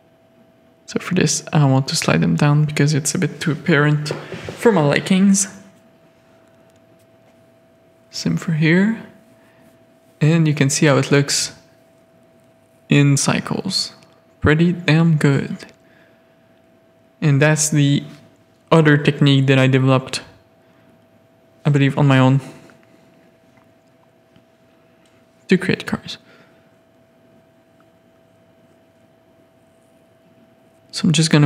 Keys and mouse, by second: 1.0 g, 2.8 click, 3.9 click, 4.3 middle click, 6.5 g, 7.1 Tab, 7.1 alt+a, 8.1 middle click, 8.3 z, 9.3 z, 10.3 middle click, 11.5 middle click, 12.2-17.0 middle drag, 17.2 middle click, 17.4-19.3 middle drag, 19.6 z, 20.0 drag, 20.8 Tab, 21.0 click, 21.3 shift+drag, 22.0 3, 22.5 1, 23.0 ctrl+r, 23.7 3, 25.2 middle click, 26.1 shift+middle click, 27.0 1, 27.1 middle click, 28.7 click, 29.4 shift+click, 29.8 g, 31.2 3.